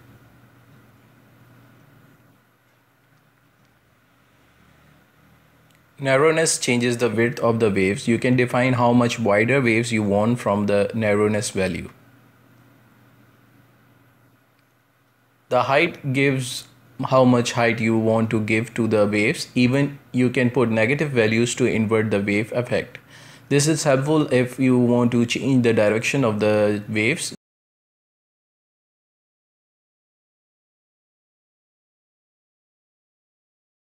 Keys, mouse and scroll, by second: 0.1-3.1 drag, 5.8-11.5 drag, 12.5-15.5 drag, 17.5-19.3 drag, 19.3-20.5 middle drag, 20.5-23.1 drag, 23.1-24.5 middle drag, 24.5-33.8 drag.